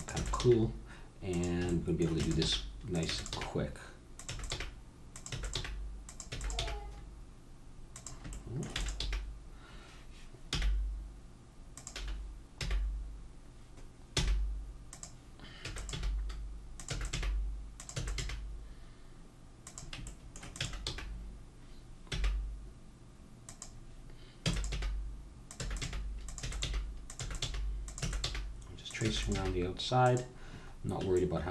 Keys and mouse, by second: 0.0-0.4 typing, 2.2-6.6 typing, 8.9 e, 11.9 e, 15.6-18.2 typing, 20.5-22.5 drag, 20.6 e, 24.5-29.3 typing.